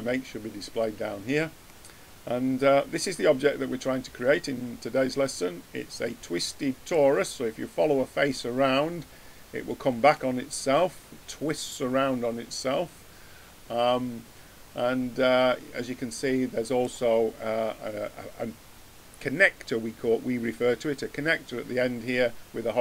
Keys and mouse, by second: 2.0-3.4 middle drag, 10.1-11.9 middle drag.